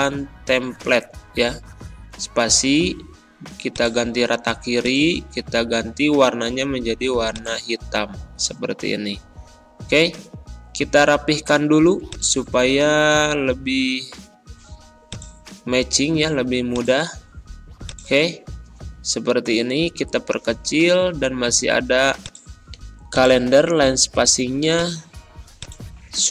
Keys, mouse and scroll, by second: 0.0-0.5 typing, 1.7 ctrl+a, 3.6 click, 7.2 click, 9.8 click, 10.6 shift+F3, 12.0 click, 12.5 ctrl+scroll up 1, 15.0-17.7 drag, 18.1 ctrl+a.